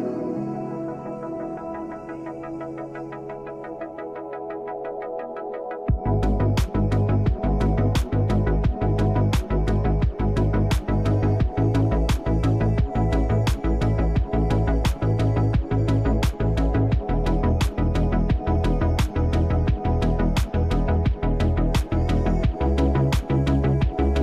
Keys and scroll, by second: 0.2 space, 4.0 space, 5.1 ctrl+z, 6.7 space, 7.9 space, 8.2 ctrl+z, 9.1 ctrl+z, 9.8 space, 12.8 space, 20.0 space, 22.1 space.